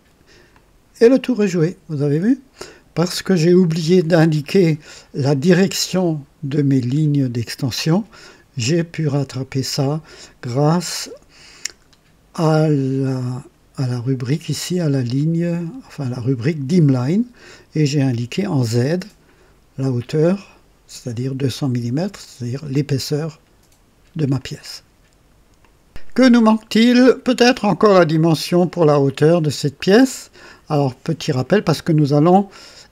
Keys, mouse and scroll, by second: 0.5 click, 1.2-3.0 drag, 3.1 click, 6.2 typing, 9.3 click, 11.8-12.1 scroll up 2, 13.2 click, 22.2-22.8 drag, 24.4 click, 25.6 click, 26.3-27.7 drag, 29.5 click, 30.5-31.8 drag.